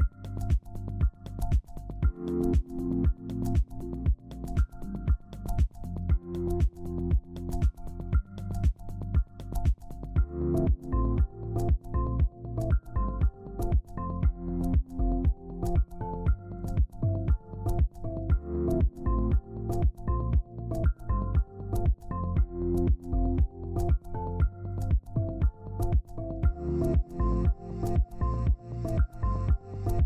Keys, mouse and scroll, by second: 0.2 ctrl+space, 1.8 double click, 5.0 double click, 9.0-12.0 drag, 15.3 double click, 17.8 typing, 18.0 Return, 19.1 typing, 28.2 click.